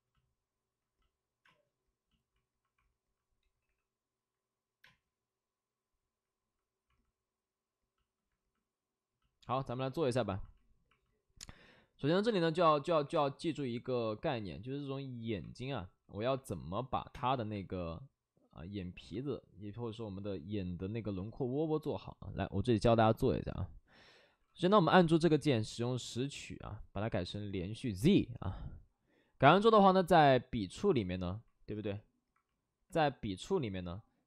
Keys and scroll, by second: 1.4 space, 3.4 3, 3.6 3, 4.8 space, 9.4 space, 12.6 space, 13.0 3, 15.8 ctrl+d, 15.8 space, 17.0 5, 17.1 space.